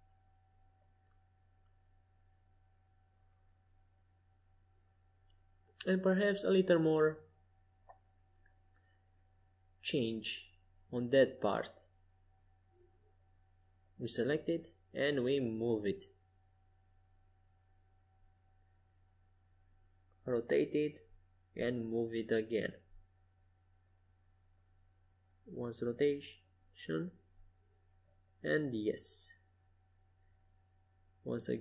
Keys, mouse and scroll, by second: 0.1 middle click, 2.9 Tab, 5.2 a, 5.7 a, 8.9-11.2 drag, 10.7 c, 15.7 g, 20.1 r, 22.5 g, 25.7 r, 27.9 a, 28.9 c.